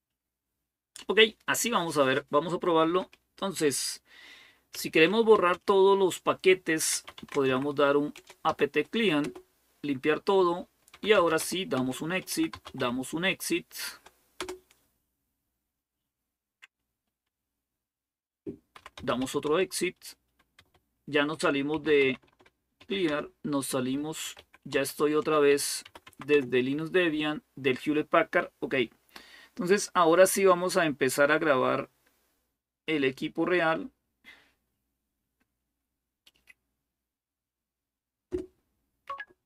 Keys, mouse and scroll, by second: 4.3-8.3 typing, 9.0 Return, 10.5-13.1 typing, 14.2 typing, 18.3-25.6 typing, 25.9 Tab, 26.1 Return.